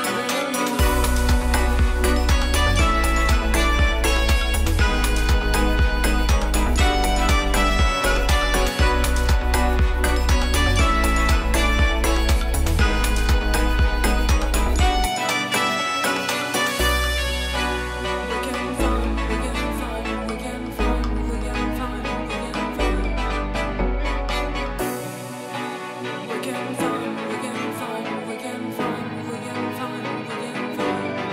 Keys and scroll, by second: 3.1 space, 3.8 [, 6.2 space, 8.5 space, 12.0 space, 13.2 space, 14.1 super+s, 14.8 space, 16.4 ], 17.9 i, 22.8 space, 25.2 space, 25.9 [, 27.7 [, 29.9 [.